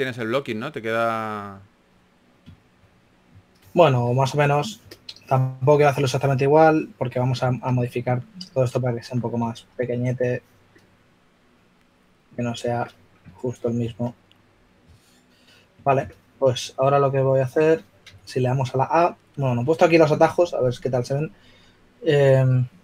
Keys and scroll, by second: 0.0-0.4 typing, 8.4 w, 9.2 w, 10.8 typing, 12.3 typing, 13.8 shift+w, 18.3 a.